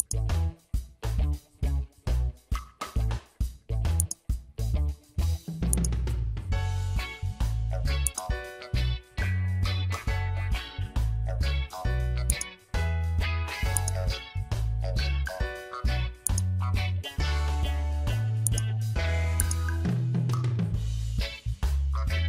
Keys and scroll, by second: 10.9 ctrl+j, 14.9 Delete.